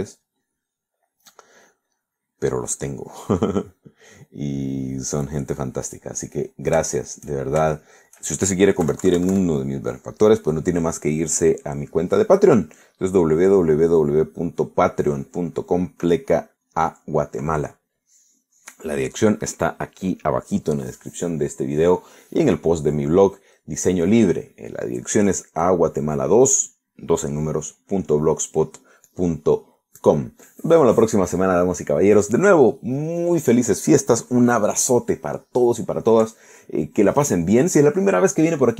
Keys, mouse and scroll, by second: 0.0-3.3 drag, 3.3 middle click, 4.7 middle click, 5.7 click, 6.7-7.9 middle drag, 8.7 shift+middle click, 9.9 KP_Subtract, 15.7 scroll down 2.